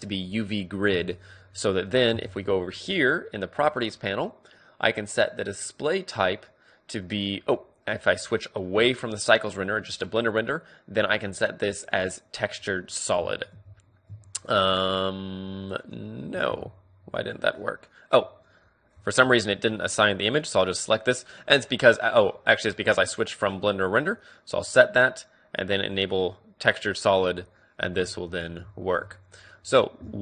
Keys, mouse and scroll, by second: 0.4-1.9 drag, 0.4 t, 0.4 n, 1.2 n, 1.5 middle click, 2.1 n, 3.0 middle click, 5.5-7.3 drag, 9.5 click, 11.9 click, 12.8-15.2 middle drag, 13.5 Tab, 14.1 Tab, 15.8-17.1 drag, 16.5 alt+z, 17.1-19.3 middle drag, 20.0 click, 25.9-27.8 drag, 27.3-30.0 middle drag, 27.8 Tab.